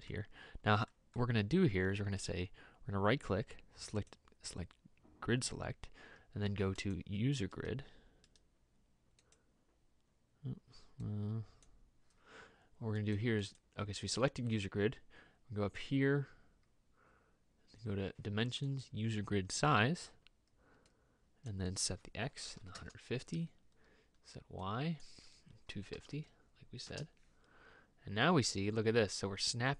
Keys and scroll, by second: 22.7 KP_1, 22.7 KP_5, 22.8 KP_0, 25.8 KP_2, 26.0 KP_5, 26.2 KP_0.